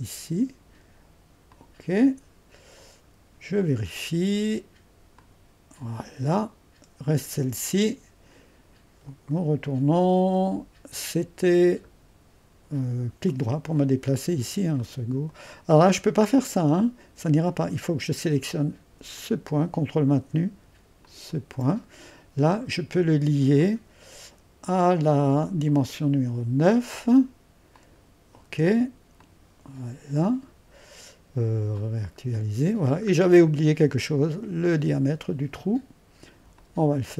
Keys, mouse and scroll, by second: 9.7-11.3 drag, 11.3-12.2 scroll down 1, 13.3 middle click, 14.1-16.3 scroll up 1, 19.2-22.3 drag, 23.6-29.1 drag, 29.2-33.1 drag, 33.1-34.7 scroll up 1, 34.7-37.1 drag.